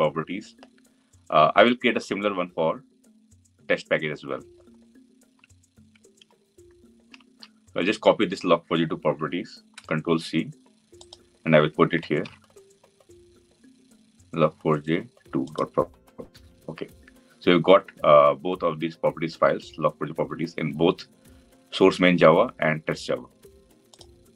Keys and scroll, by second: 0.0 ctrl+s, 9.5 ctrl+c, 12.3 ctrl+v.